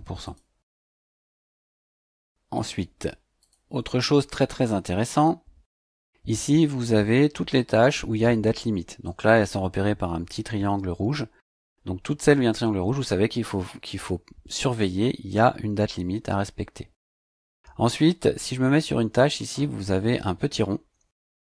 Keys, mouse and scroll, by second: 0.2 click, 3.4 click.